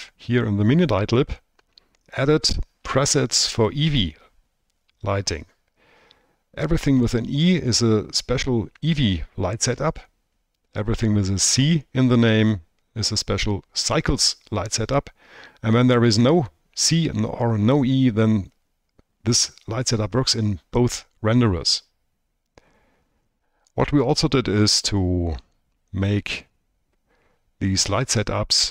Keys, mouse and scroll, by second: 0.0 click, 3.4-23.7 drag, 26.1-28.7 drag.